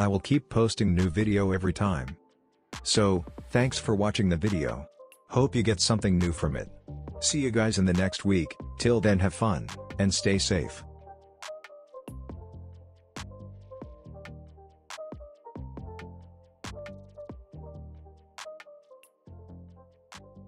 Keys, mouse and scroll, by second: 2.6-10.4 drag, 5.5-5.8 drag, 10.4 space.